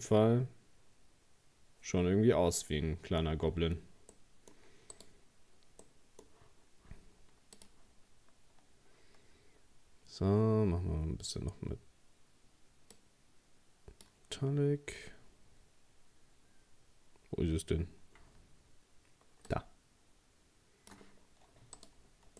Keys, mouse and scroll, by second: 3.5-4.1 scroll up 2, 4.1 middle click, 5.0 right click, 5.8-7.6 middle drag, 7.6-9.5 drag, 9.5-11.4 scroll down 4, 12.9-21.2 drag, 21.2-21.8 scroll down 2, 21.8 right click.